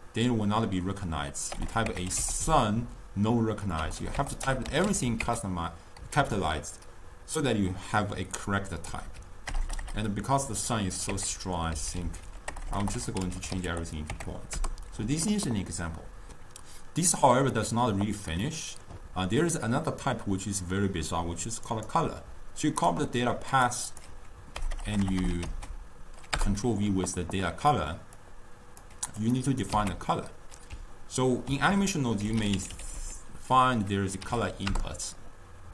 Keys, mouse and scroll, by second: 1.8 BackSpace, 4.1 BackSpace, 12.9 BackSpace, 18.5-21.6 middle drag, 21.7-23.6 right drag, 23.6-24.9 drag, 24.9 BackSpace, 25.1 BackSpace, 28.2 drag, 29.4 click, 30.2 x, 31.5 ctrl+a.